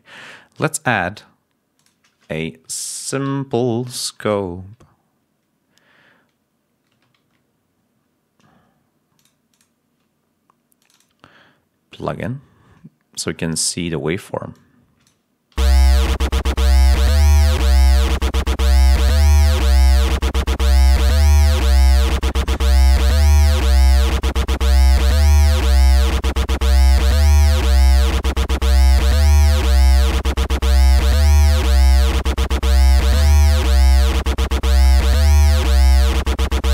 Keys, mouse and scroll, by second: 0.1 right click, 1.7 click, 2.5-3.5 typing, 7.1 s, 9.1 click, 9.4 click, 15.5 l, 18.1 click, 18.9 click, 19.4 click, 21.0 click, 22.7 click, 24.8 click, 25.5 click, 27.8 click, 34.3 click, 35.4 click, 36.5 click.